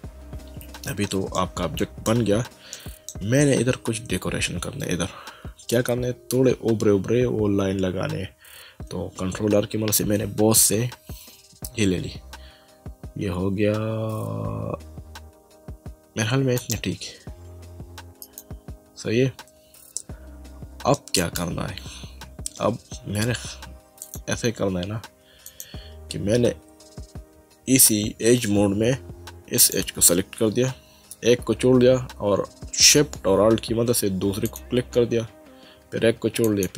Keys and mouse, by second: 1.4 shift+middle click, 2.7 middle click, 5.4 Tab, 9.3 ctrl+r, 16.6 click, 18.2 right click, 20.0 middle click, 24.0 click, 25.5 click, 29.6 click, 34.4 click, 36.4 alt+shift+click.